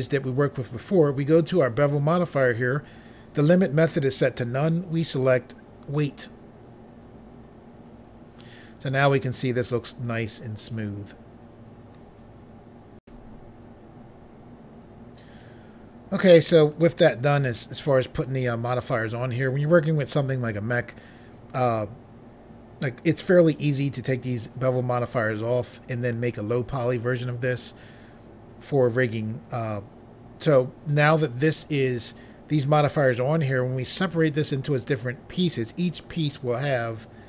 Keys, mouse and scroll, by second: 5.8 click, 13.0 Pause.